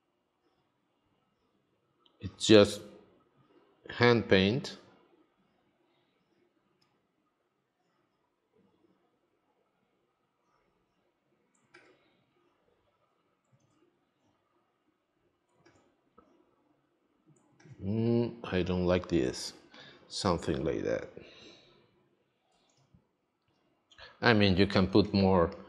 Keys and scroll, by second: 11.7 super+z, 13.6 super+z, 15.6 super+z, 17.5 super+z, 19.5 space, 22.7 space, 25.0 space.